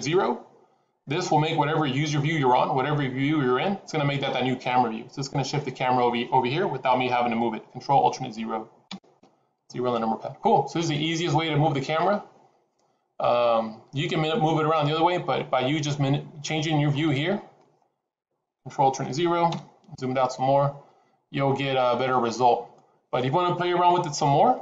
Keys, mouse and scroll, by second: 8.8 ctrl+alt+KP_0, 15.8 middle click, 17.1-17.6 scroll down 2, 17.6 middle click, 19.5 ctrl+alt+KP_0, 20.6-21.4 scroll up 3.